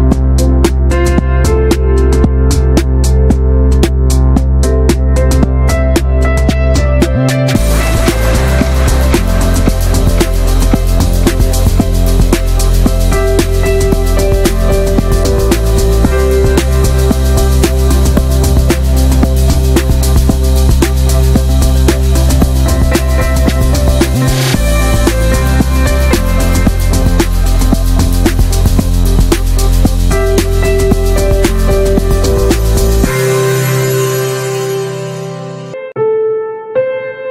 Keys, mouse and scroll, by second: 0.0 click, 0.4-1.2 scroll up 2, 0.6 shift+middle click, 1.2 click, 1.4 middle click, 1.6 ctrl+s, 2.2 Tab, 2.3-2.9 middle drag, 2.9 Tab, 3.5 p, 3.6 Tab, 3.8 drag, 4.0 middle drag, 4.2 ctrl+s, 4.4 click, 4.6 /, 4.9 /, 5.3-5.7 middle drag, 5.7 Tab, 5.9 middle click, 6.1 a, 6.4 a, 6.8 right click, 7.5 shift+middle click, 7.9-8.6 scroll up 1, 8.6 middle click, 8.8 alt+z, 9.0 shift+middle click, 9.7 click, 10.0 shift+middle click, 10.1-10.6 scroll up 2, 10.3 middle click, 10.6-10.9 shift+middle drag, 10.9 scroll up 1, 11.1-12.0 shift+middle drag, 12.0 3, 12.1 click, 12.3-12.8 middle drag, 12.8 i, 13.9-14.4 shift+middle drag, 14.4 e, 15.0-15.5 middle drag, 15.5 ctrl+b, 16.7 Tab, 17.0 middle click, 17.3 Tab, 17.4 shift+middle click, 17.9 scroll up 1, 18.1-18.6 middle drag, 18.6 click, 19.0 middle click, 19.1 scroll up 1, 19.2 2, 19.6-20.2 shift+middle drag, 20.2 click, 20.5 scroll down 2, 20.7-21.6 middle drag, 21.6 scroll down 1, 21.8 shift+middle click, 22.4-23.3 scroll up 3, 22.6 shift+middle click, 23.3 alt+shift+click, 23.6 alt+shift+click, 23.7 scroll down 1, 23.9 shift+middle click, 24.5-24.9 shift+scroll up 1, 24.9 alt+shift+click, 25.0-25.5 shift+middle drag, 27.0 a, 27.3 a, 27.6-28.6 right drag, 28.6-29.2 middle drag, 29.2 click, 29.6 shift+middle click, 29.7 scroll down 1, 29.9-30.3 middle drag, 30.3 Tab, 30.4 scroll down 2, 30.5-30.9 shift+middle drag, 30.9 ctrl+s, 31.1-31.5 shift+middle drag, 31.5 ctrl+s, 31.7 click, 32.0 /, 32.3-32.7 middle drag, 32.7 click, 32.9 /, 33.1-33.5 middle drag, 33.5 Tab, 33.7 a, 34.1 a, 34.3-35.9 right drag, 35.9 middle click, 36.5 Tab, 36.7 click, 36.8 ctrl+a, 37.2 Tab.